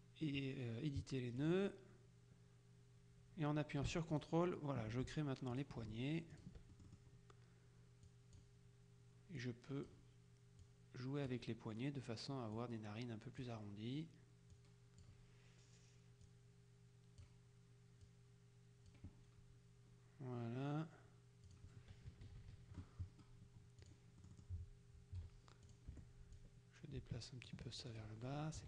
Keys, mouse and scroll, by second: 1.5 click, 4.2 ctrl+click, 5.6 click, 6.4 click, 8.1 click, 9.5 click, 10.7 click, 12.6 click, 14.6 click, 16.3 click, 18.1 click, 21.5 click, 22.1 KP_Subtract, 23.9 click, 24.3 right click, 25.7 click, 26.1 F1, 26.5-28.5 drag.